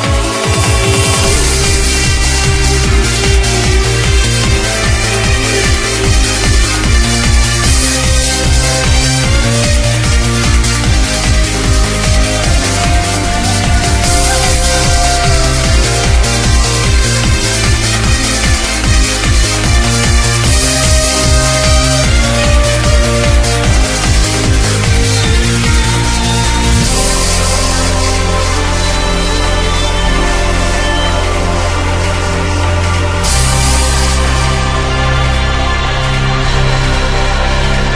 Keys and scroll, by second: 34.3 ctrl+z.